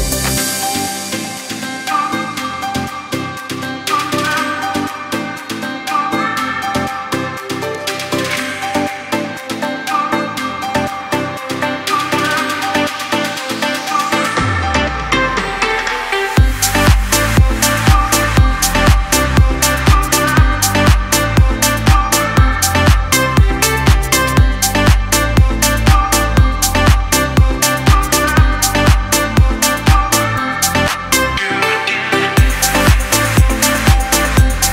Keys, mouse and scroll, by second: 1.0 Up, 2.2 Left, 5.4-6.3 scroll down 2, 6.5 click, 6.9 space, 6.9 click, 7.4 space, 7.6 click, 7.9 alt+scroll down 1, 8.4 click, 8.7-9.1 alt+scroll down 1, 9.1-11.2 typing, 9.4 click, 9.7 click, 10.5 click, 10.8 click, 11.4 click, 11.7 alt+scroll up 1, 12.3 click, 14.5-17.8 drag, 18.2 alt+scroll down 1, 19.0 click, 19.2 space, 19.3 click, 19.7 space, 20.1-20.5 alt+scroll up 1, 20.7 space, 20.8 click, 21.2 space, 21.7 alt+scroll up 1, 22.2 click, 27.4-28.4 scroll up 1, 28.4 click, 30.1 e, 34.3 click.